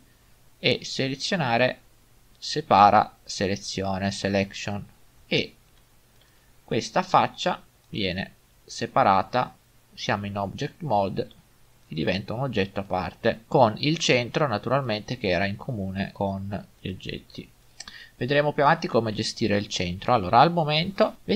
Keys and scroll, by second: 5.7 Tab, 11.2 g, 20.6 a, 20.8 Delete.